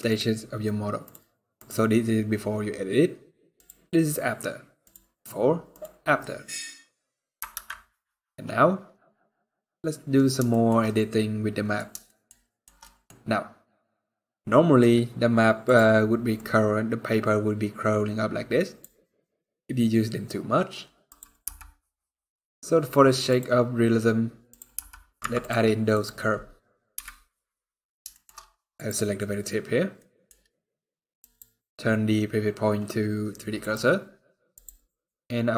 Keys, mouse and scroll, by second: 1.1 click, 1.4 click, 3.3 click, 6.1 click, 6.6 scroll down 2, 6.9 scroll up 2, 9.1 ctrl+s, 9.1 scroll down 1, 10.2 shift+middle click, 10.6 middle click, 11.8 shift+middle click, 12.1 shift+scroll down 1, 12.2 shift+middle click, 12.5-12.9 scroll up 2, 12.6 middle click, 14.0 middle click, 14.6 scroll down 1, 15.4 click, 16.1 click, 20.8 click, 21.2 n, 23.0 click, 24.5 click, 24.5 n, 24.9 Tab, 25.6 click, 26.7 KP_Decimal, 27.4-27.8 scroll down 4, 27.8 shift+middle click, 28.0 scroll up 2, 28.5 click, 29.7 middle click, 30.9 click, 34.3 click.